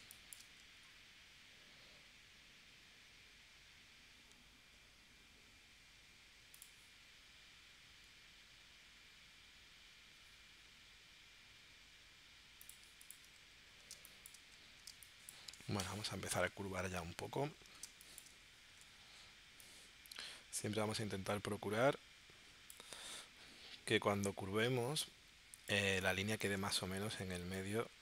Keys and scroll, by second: 0.0 space, 13.9 space, 14.9 space, 17.8 space, 18.7 shift+c, 26.0 space.